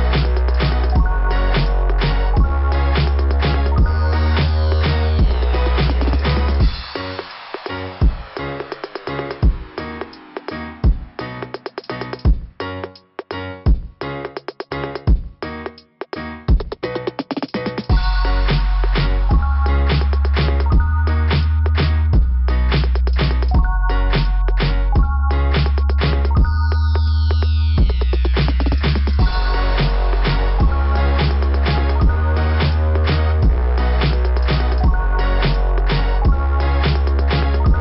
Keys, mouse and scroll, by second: 0.7 click, 4.2 click, 5.6 click, 8.5 click, 8.8 click, 12.3 scroll up 2, 18.2 click, 18.8 click, 19.0 click, 20.0 click, 25.3 click, 26.2-26.5 scroll up 2, 28.7 scroll down 1, 28.7 ', 30.7 click, 31.6 click, 31.8 click, 32.1 click, 32.8 click, 35.8 scroll down 2, 35.9 scroll up 2, 36.1 scroll down 2, 36.2 scroll up 1, 36.4 scroll down 2, 37.1 scroll up 2.